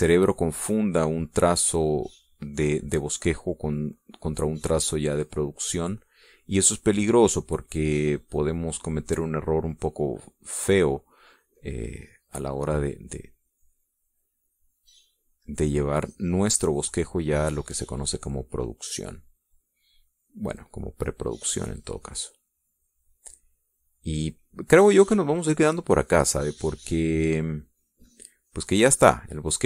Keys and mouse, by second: 1.3 ctrl+z, 1.9-12.3 ctrl+drag, 12.4-13.8 drag, 14.1-29.6 drag.